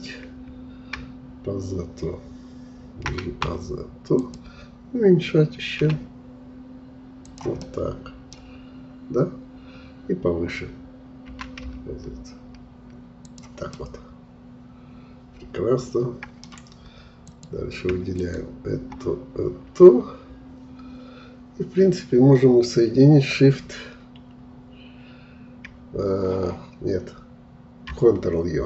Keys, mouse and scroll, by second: 5.8 s, 7.6-8.6 middle drag, 8.6-11.3 scroll up 1, 11.3 g, 13.7-16.7 middle drag, 17.2-21.2 drag.